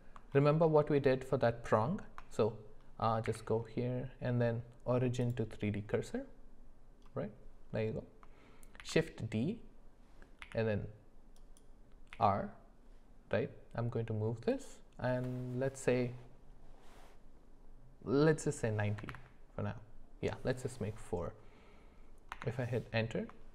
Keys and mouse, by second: 0.7 shift+middle click, 3.2 q, 8.8 shift+d, 12.1 r.